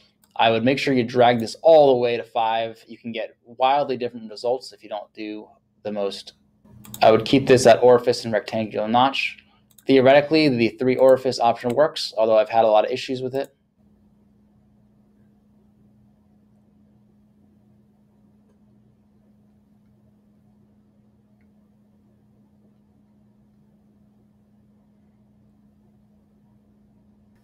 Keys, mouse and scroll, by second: 6.9 click, 9.7 click.